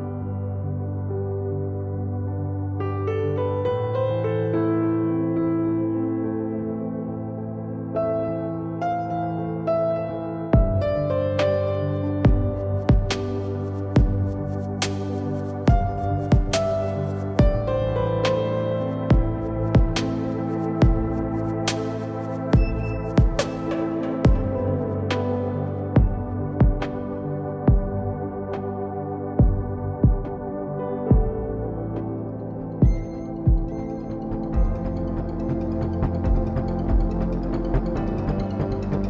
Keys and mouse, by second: 1.2 ctrl+Tab, 3.0 g, 6.2 g, 9.2 i, 10.4 e, 12.4 Tab, 13.4 Tab, 14.0 ctrl+Tab, 16.4 ctrl+b, 17.3 Tab, 18.4 Tab, 19.6 ctrl+Tab, 22.5-23.7 drag, 23.7 g, 33.4 g, 35.4 g, 38.0 KP_3, 38.3 z.